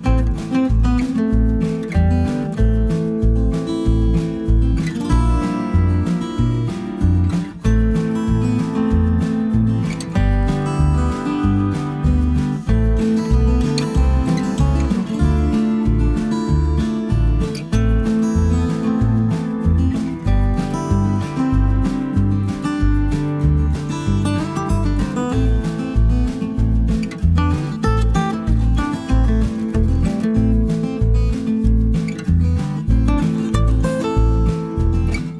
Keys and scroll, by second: 2.7 b, 9.1 ctrl+d, 10.0 ctrl+*, 11.6 Page_Down, 12.5 Page_Up, 16.7 ctrl+g, 18.2 ctrl+g, 19.8 ctrl+z, 20.5 ctrl+g, 26.3 ctrl+z.